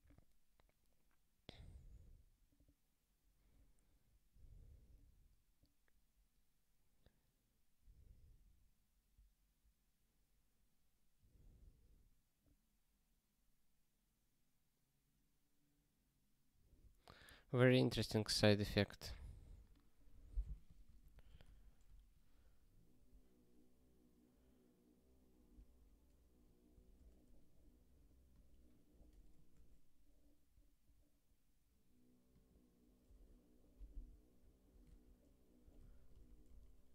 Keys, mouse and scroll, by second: 3.1 scroll down 1, 5.1 scroll down 1, 12.6 scroll down 1, 18.0 click, 20.1 click, 20.7 ctrl+space, 20.8 ctrl+a, 21.1 alt+;, 21.5 ctrl+s, 22.1 ctrl+k, 34.8 ctrl+k, 35.8 ctrl+/, 36.2 ctrl+s, 36.7 ctrl+k.